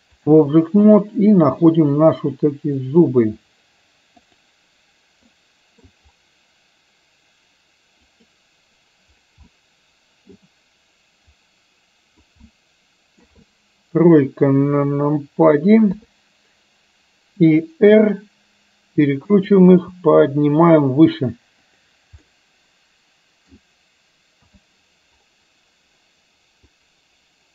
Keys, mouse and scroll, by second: 1.0-1.7 middle drag, 3.0 click, 4.3 click, 5.3-6.0 middle drag, 8.3 click, 9.7 middle click, 11.6 click, 12.7-13.3 middle drag, 16.0 KP_3, 18.1 r, 19.7 g, 22.3-23.6 middle drag, 24.6 KP_1, 27.0-27.5 drag.